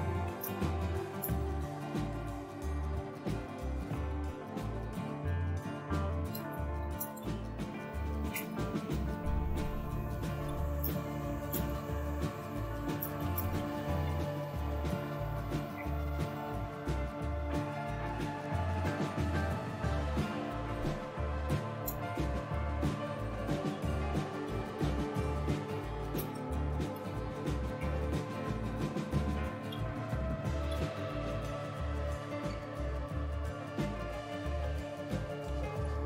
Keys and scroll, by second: 0.0-15.0 typing, 17.0 typing, 21.9 space, 23.3-30.9 typing, 31.6 Return, 33.4-36.0 typing.